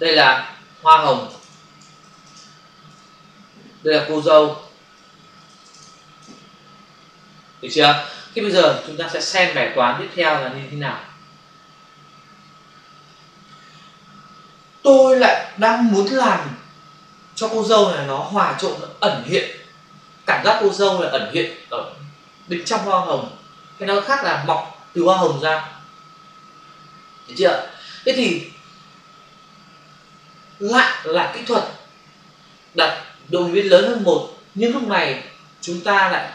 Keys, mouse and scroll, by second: 0.1 double click, 1.1-2.3 typing, 2.8 Return, 4.2 click, 4.5 click, 4.7 double click, 5.4-5.8 typing, 6.2 Return, 10.1 click.